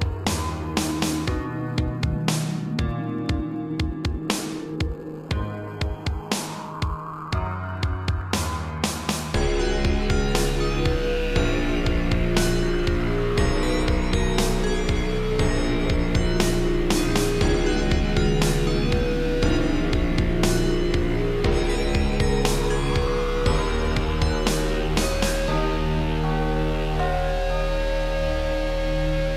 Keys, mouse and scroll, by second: 0.5 click, 0.6 click, 1.3 shift+middle click, 2.4 click, 5.7 middle click, 8.3 shift+click, 10.7 shift+click, 11.1 scroll, 11.2 middle click, 12.4 b, 12.5 click, 13.4 b, 13.7 click, 14.9 7, 15.7 shift+middle click, 15.9 middle click, 16.2 g, 16.6 x, 20.3 click, 24.2 ctrl+c, 24.4 Right, 24.9 ctrl+v, 27.0 Left, 27.5 Left, 27.7 Right, 28.6 middle click, 29.0 scroll up 1.